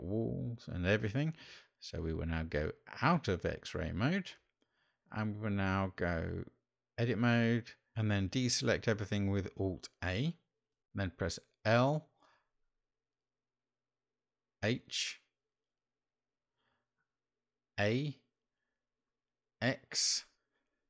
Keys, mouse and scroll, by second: 2.1 click, 7.5 Tab, 9.6 alt+a, 11.8 l, 15.8 h, 17.8 a, 20.0 x.